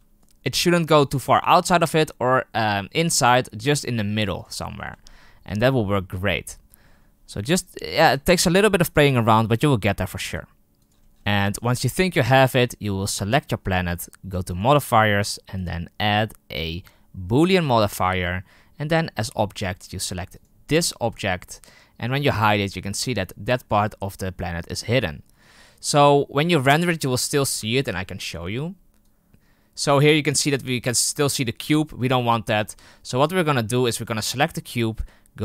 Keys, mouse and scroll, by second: 1.0 g, 4.6-5.0 scroll down 6, 5.0-8.5 shift+middle drag, 8.5-9.3 scroll up 3, 9.3 r, 10.1 g, 10.9-11.4 scroll down 11, 11.4 shift+middle click, 11.7-13.0 scroll down 4, 13.0 right click, 17.5-19.1 drag, 21.5 right click, 22.9 h, 29.0 F12, 33.4 click, 34.2 click.